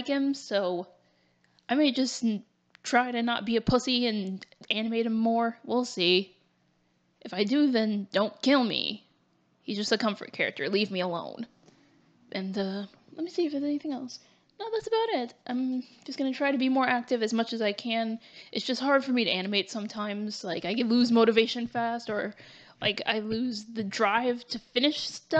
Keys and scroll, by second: 3.8 ctrl+z, 7.0 ctrl+z, 7.8 ctrl+shift+z, 8.0 ctrl+y, 9.1 ctrl+z, 19.7 ctrl+z, 23.8 ctrl+z.